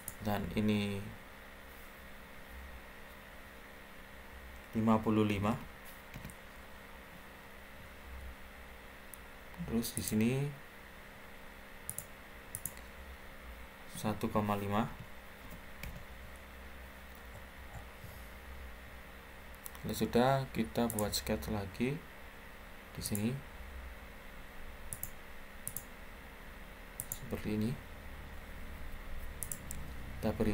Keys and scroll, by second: 5.0-5.7 typing, 6.0 Return, 13.6-15.3 typing, 15.7 Return, 28.5 Escape.